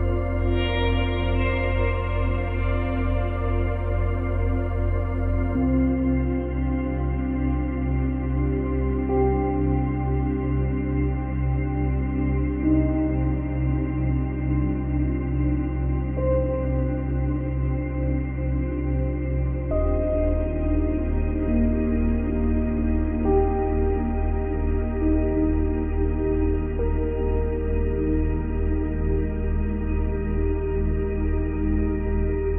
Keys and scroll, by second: 0.8 Delete, 11.6 Delete, 15.2 space, 16.9 space, 21.6 space, 23.2 space, 25.7 Delete, 26.7 space, 29.8 space, 31.2 Delete.